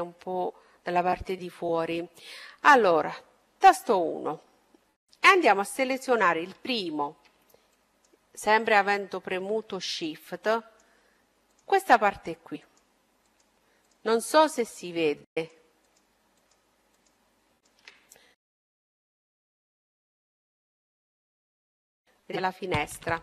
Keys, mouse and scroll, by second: 1.7-3.6 middle drag, 3.5 KP_1, 5.7-9.1 right drag, 10.1-20.1 right drag, 18.1-20.2 middle drag, 22.7-23.2 middle drag.